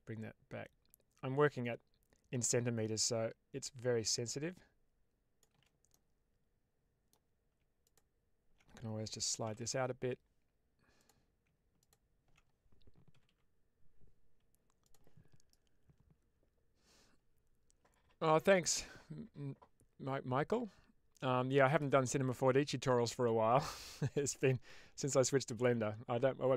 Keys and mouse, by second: 5.8-7.0 middle drag, 7.8 alt+click, 9.3 g, 9.5 g, 10.8 click, 11.7 click, 13.0 g, 13.2 g, 14.7 click.